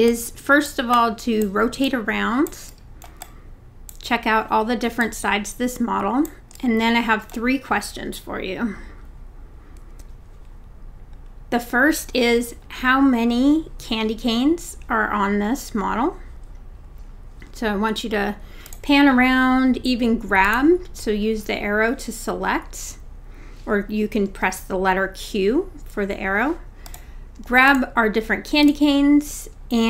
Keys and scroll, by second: 24.3 q.